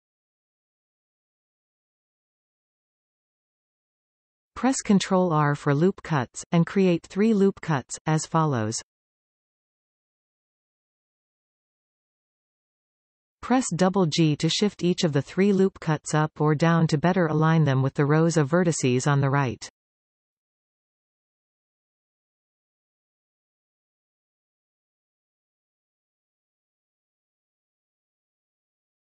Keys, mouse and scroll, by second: 0.2-1.3 drag, 1.3-13.5 middle drag, 4.1 alt+a, 4.7 ctrl+r, 6.4 right click, 7.7-8.3 scroll up 2, 8.7-9.7 scroll up 1, 9.7-11.2 scroll down 1, 11.2 alt+a, 13.5 alt+shift+click, 14.5 g, 16.1 click, 16.5-19.9 middle drag, 19.2 alt+a, 19.9 alt+shift+click, 20.8 g, 22.1 click, 22.4-25.2 middle drag, 24.4 alt+a, 25.2 alt+shift+click, 26.1 g, 28.2 click, 28.5 scroll down 1, 28.7-29.0 middle drag.